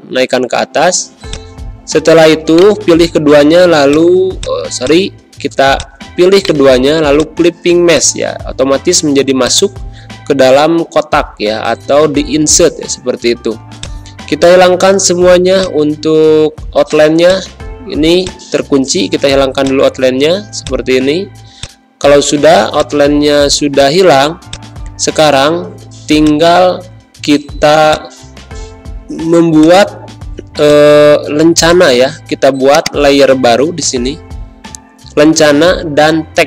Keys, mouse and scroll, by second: 2.5 right click, 3.8 click, 6.3 right click, 7.1-13.7 drag, 21.1 z, 21.5 click, 22.3 space, 22.7 click, 22.8 space, 23.7 click, 24.1 space, 24.4 click, 24.7 space, 27.4 ctrl+End, 27.8-29.5 drag, 33.8 t, 35.4-36.4 typing.